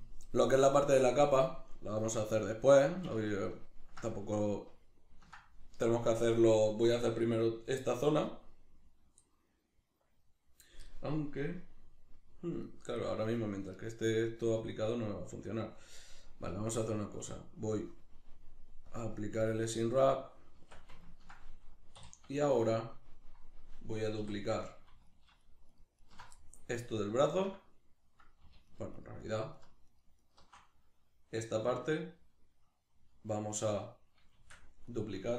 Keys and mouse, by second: 12.6 right click, 13.0-16.5 middle drag, 16.5-21.0 drag, 20.6 Tab, 21.0-25.0 ctrl+middle drag, 22.0 3, 24.2 3, 25.0 alt+right click, 25.4 alt+shift+right click, 25.7 alt+shift+right click, 26.0 alt+shift+right click, 26.4-28.7 middle drag, 28.7 alt+shift+right click, 29.0 alt+shift+right click, 29.2 alt+shift+right click, 29.6 alt+shift+right click, 29.9 alt+shift+right click, 30.2 alt+shift+right click, 34.4 shift+d, 35.0 right click.